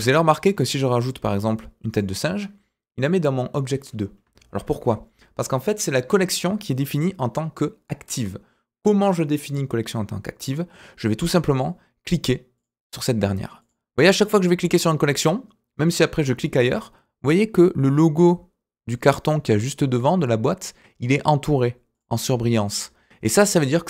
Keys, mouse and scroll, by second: 4.5 ctrl+z, 11.5 click, 12.5 click, 13.6 click, 14.7 click, 15.9 click, 21.9 click, 22.6 click.